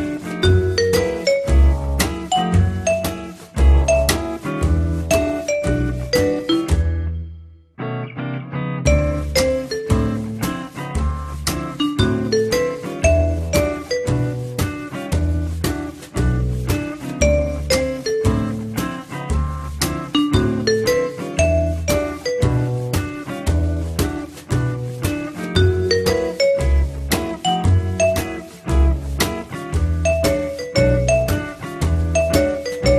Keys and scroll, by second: 23.2 t, 25.0 F3.